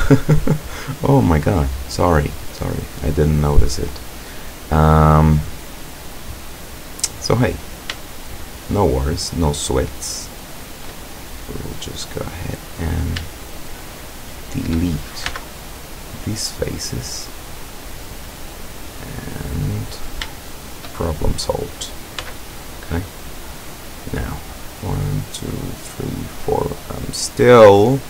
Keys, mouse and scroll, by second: 0.3 scroll up 2, 1.4 scroll up 2, 1.8 scroll down 2, 7.7 shift+right click, 8.2 shift+right click, 9.7 shift+right click, 10.0 shift+right click, 10.6 shift+right click, 11.4-13.2 middle drag, 13.6 shift+right click, 14.2 shift+right click, 15.3 x, 16.2 click, 17.5-18.2 middle drag, 18.3 middle click, 20.3-21.0 shift+middle drag, 21.4 right click, 22.3 x, 22.6 click, 23.2 scroll down 2, 23.7-24.5 middle drag, 27.6-28.0 middle drag.